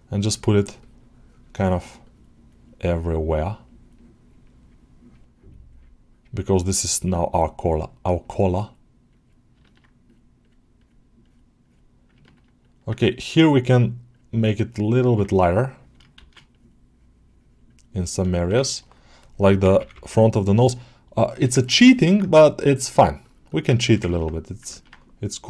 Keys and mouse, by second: 0.1-2.0 drag, 2.4-3.4 drag, 3.5-4.8 drag, 5.6-6.8 drag, 7.2-8.5 drag, 9.0 click, 9.5 ctrl+middle click, 10.3 click, 10.6 click, 11.1 click, 11.5 click, 12.1 ctrl+alt+middle click, 12.5 alt+middle click, 14.0-15.0 ctrl+drag, 17.5 click, 17.9 alt+middle click, 18.2 alt+shift+middle click, 18.5 ctrl+alt+middle click, 20.1 click, 21.2 alt+shift+middle click, 21.5 ctrl+middle click, 21.8 shift+middle click, 22.4-23.5 drag, 23.6 alt+shift+middle click, 24.0 alt+middle click, 24.6 ctrl+alt+middle click.